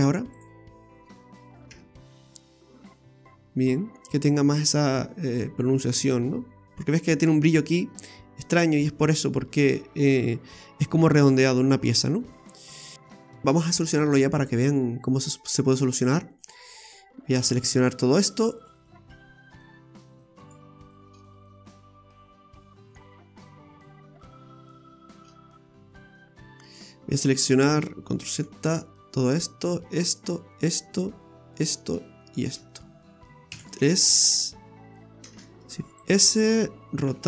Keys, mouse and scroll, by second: 0.3 click, 0.8-1.1 scroll down 2, 1.1 middle click, 1.6 Tab, 2.0 middle click, 12.3-12.8 scroll down 4, 12.8 middle click, 13.0 scroll up 2, 13.1 alt+shift+right click, 13.2 alt+shift+right click, 14.4 click, 15.4 right click, 16.0 alt+shift+right click, 16.3 right click, 17.3 alt+shift+right click, 18.3 right click, 18.6 right click, 18.8 right click, 19.6 shift+right click, 20.1 shift+right click, 20.4 shift+right click, 20.8 shift+right click, 22.5 middle click, 25.3-25.8 scroll up 7, 26.6 alt+shift+right click, 28.3 ctrl+z, 29.3 alt+shift+right click, 29.9 alt+shift+right click, 30.5 alt+shift+right click, 31.6 alt+shift+right click, 32.2 alt+shift+right click, 32.7 middle click, 33.5 KP_3, 35.3 shift+s, 37.0 r.